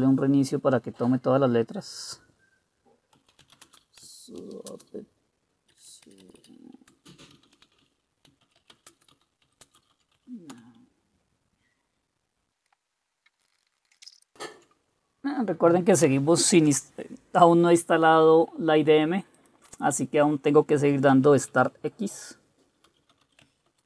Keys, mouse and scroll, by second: 3.1-10.7 typing, 12.7 Return, 13.1-14.5 typing, 22.7-23.8 typing.